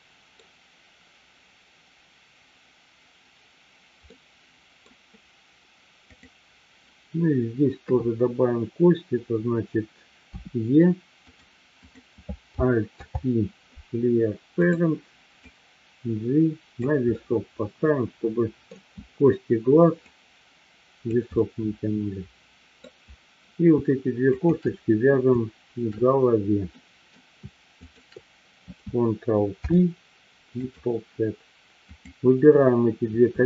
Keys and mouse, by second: 4.1-4.8 middle drag, 6.1-6.8 drag, 7.8 KP_3, 10.3 e, 11.3 click, 13.0 alt+p, 15.4-16.8 drag, 17.3-18.8 middle drag, 20.1 click, 21.4-22.9 middle drag, 26.8 middle click, 27.9 shift+click, 29.5 ctrl+p, 31.8 click.